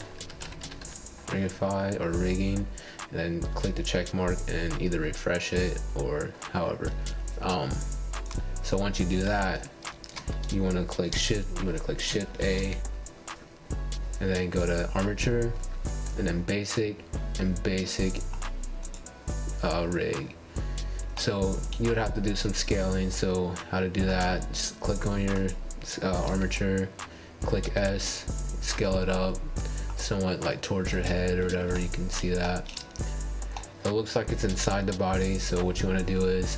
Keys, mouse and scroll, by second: 6.9 click, 7.7 Tab, 9.1-9.7 middle drag, 9.7-10.4 scroll down 1, 10.4 click, 12.8 click, 13.0 shift+a, 23.2-23.8 middle drag, 23.8 scroll down 1, 23.9 click, 24.4 g, 25.1 middle click, 25.2 scroll down 1, 25.3 Tab, 25.5 Tab, 25.8 scroll up 4, 25.9 middle click, 26.5 click, 26.9-28.4 middle drag, 28.4 scroll down 2, 28.5 scroll up 2, 29.0 x, 29.6 shift+a, 31.4 middle click, 31.8 alt+z, 32.3 s.